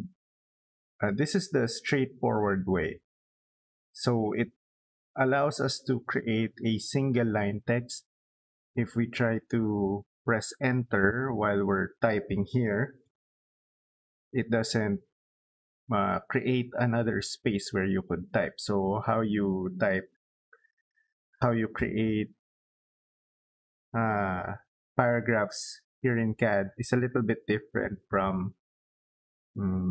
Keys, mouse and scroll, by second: 9.0 click, 9.2 click, 11.0 click, 12.6 Return, 19.7-21.3 middle drag.